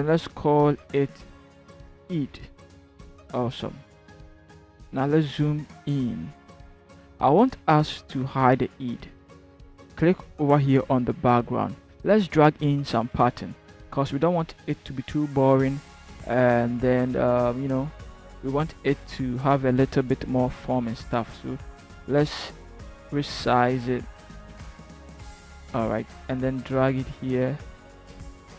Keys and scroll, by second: 1.4 e, 1.6 i, 1.7 d, 2.1 Return, 5.3 ctrl+=.